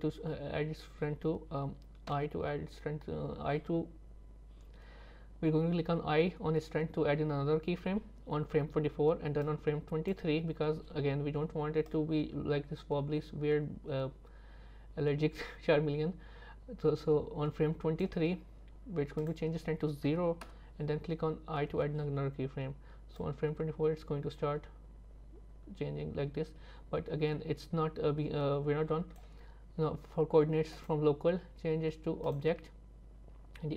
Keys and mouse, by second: 9.5 click, 11.9-18.1 drag, 19.4-20.5 drag, 23.2-29.3 drag, 30.9-32.4 drag.